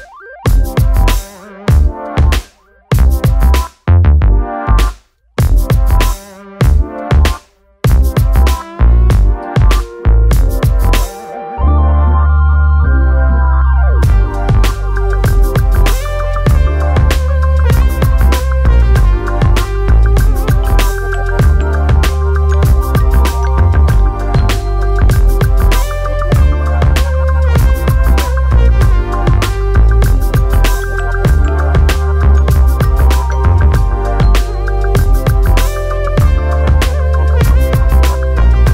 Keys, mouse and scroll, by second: 3.4 s, 4.3 scroll down 1, 4.4 middle click, 4.7 click, 5.1 KP_7, 5.5 click, 6.3 r, 7.1 click, 7.4 middle click, 8.1 s, 8.3 middle click, 8.5 scroll down 2, 8.9 KP_7, 9.3 click, 9.6 middle click, 10.0 click, 11.0 middle click, 11.5 r, 13.7 click, 13.8 middle click, 14.5 scroll up 1, 14.6 middle click, 15.4 shift+d, 16.1 r, 17.1 KP_7, 17.5 r, 18.6 g, 18.8 middle click, 19.4 r, 19.9 KP_7, 22.3 5, 26.1 click, 26.9 alt+a, 27.0 scroll down 1, 27.1-27.5 scroll up 4, 27.5 scroll down 1, 27.7 middle click, 28.0 scroll up 1, 28.2 shift+middle click, 28.6 click, 29.1 click, 30.7 click, 31.7 g, 32.5 alt+d, 35.5 g, 36.2 click, 36.3-36.9 middle drag, 36.9 click, 37.2 s, 37.7 click, 38.4 middle click.